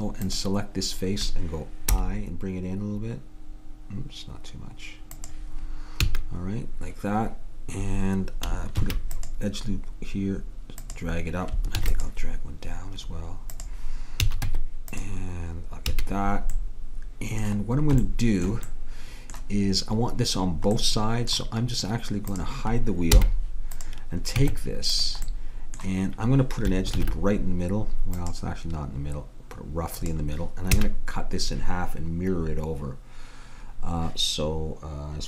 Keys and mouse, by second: 2.0 i, 6.1 a, 8.8 ctrl+r, 11.8 ctrl+r, 14.3 a, 14.5 Tab, 16.0 a, 22.4-24.5 drag, 23.2 h, 24.5 Tab, 27.1 ctrl+r, 30.8 a.